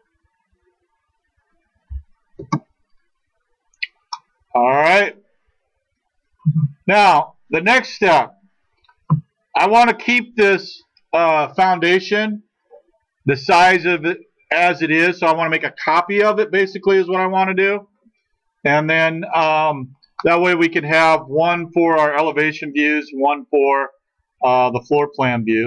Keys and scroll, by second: 2.4 space.